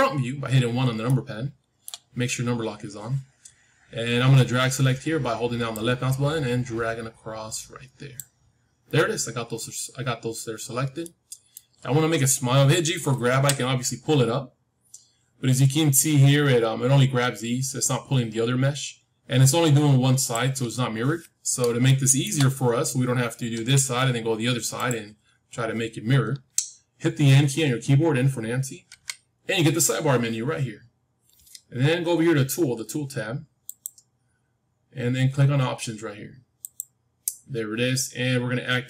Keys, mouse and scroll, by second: 0.6-1.0 scroll down 1, 1.0-3.0 middle drag, 5.6-8.1 drag, 9.1-9.6 scroll down 1, 9.6-13.2 middle drag, 13.2 g, 20.7-24.5 middle drag, 23.5 g, 28.8 n, 33.5-36.0 drag, 36.5-38.6 drag.